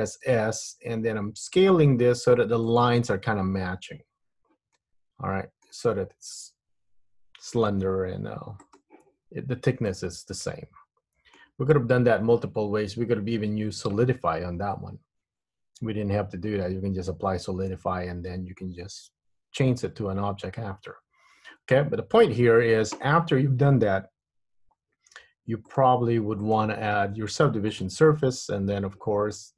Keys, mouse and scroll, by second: 0.2 s, 4.8 middle click, 8.8 click, 10.1 middle click, 23.1 Tab, 25.8 click, 26.5 click.